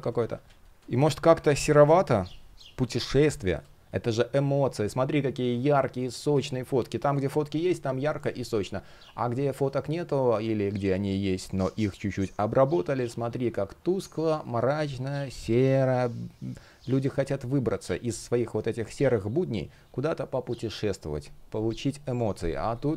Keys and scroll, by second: 0.5 space, 0.7 super+\, 3.2 space, 22.1 space.